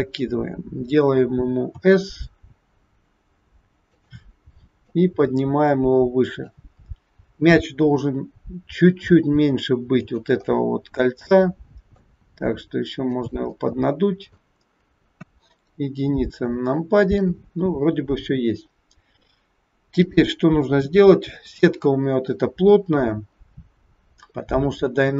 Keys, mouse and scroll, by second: 0.4-1.1 scroll down 4, 1.8 s, 4.8 click, 6.9-7.4 scroll up 5, 8.9 s, 10.6 middle click, 12.3 s, 13.7 middle click, 13.7 scroll up 1, 15.3 KP_1, 16.0-16.7 scroll down 3, 16.9 shift+middle click, 19.9 click, 23.3-24.9 scroll up 11.